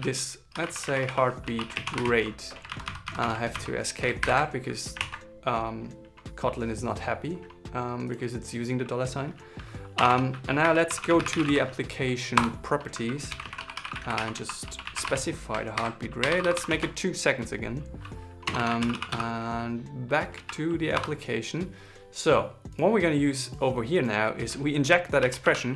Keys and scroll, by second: 2.4 alt+Left, 3.9 alt+shift+7, 4.7 super+s, 15.4 shift+o, 17.4 super+s.